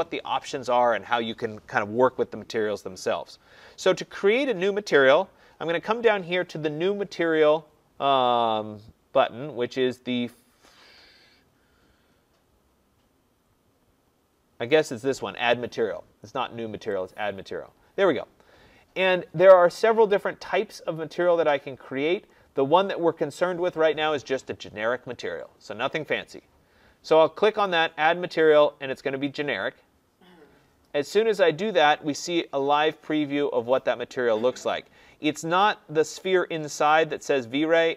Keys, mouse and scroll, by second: 17.0 click, 21.7-22.2 drag, 27.6-32.8 drag.